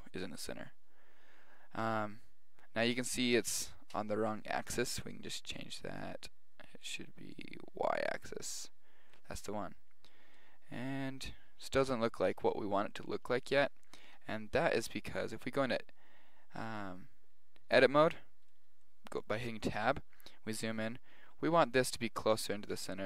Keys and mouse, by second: 5.0-8.6 drag, 8.1-10.2 middle drag, 9.6 z, 12.9 middle click, 13.1-14.9 middle drag, 15.0-17.2 middle drag, 15.7 Tab, 18.5-20.7 middle drag.